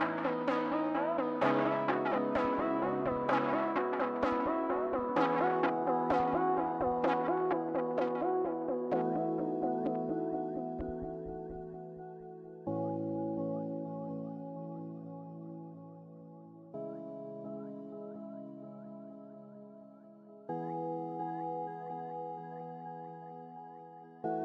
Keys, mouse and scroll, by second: 8.0 scroll down 1, 8.4 middle click, 9.0-11.2 scroll down 1, 21.6 scroll down 1, 21.7-22.7 scroll up 1, 22.7-23.7 scroll down 2, 23.0 middle click, 23.7 middle click.